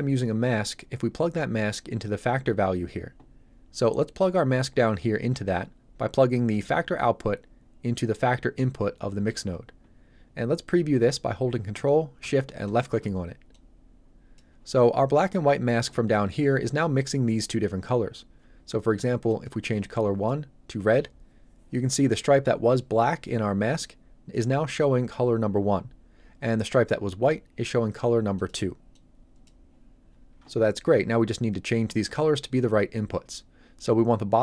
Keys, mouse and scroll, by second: 6.5 click, 12.6 ctrl+shift+click, 13.5 shift+click, 13.5 click, 19.3 click, 28.3 click.